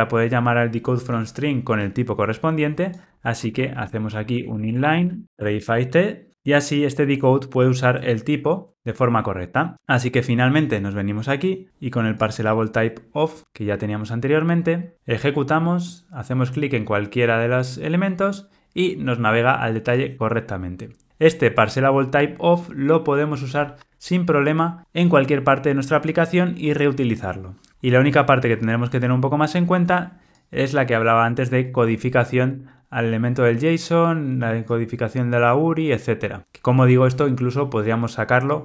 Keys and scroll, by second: 6.3 Return, 13.4 ctrl+r.